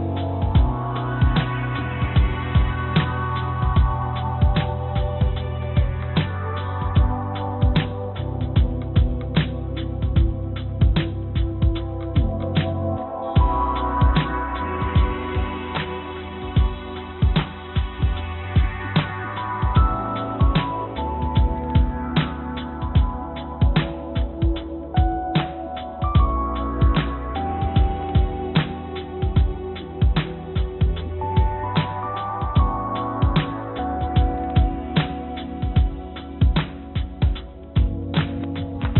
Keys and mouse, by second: 0.0 e, 2.7 s, 6.2 f, 12.6 Tab, 13.7 shift+d, 24.3 ctrl+d, 25.0 click, 26.7 click, 27.5 shift+d, 34.2 x, 35.7 g.